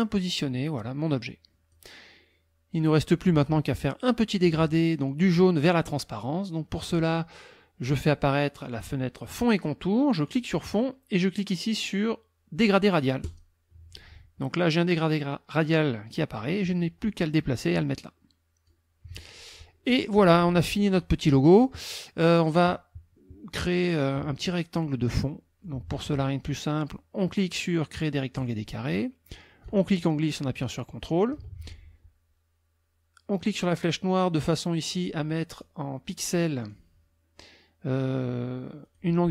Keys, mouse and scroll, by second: 8.7 click, 10.2-11.6 drag, 13.3 click, 16.3-18.8 drag, 19.3 click, 20.1 KP_Subtract, 21.3 click, 22.2-23.6 drag, 25.1 click, 28.4 click, 29.6-31.5 ctrl+drag, 33.5 click, 35.6 click, 36.6 click, 38.9 click.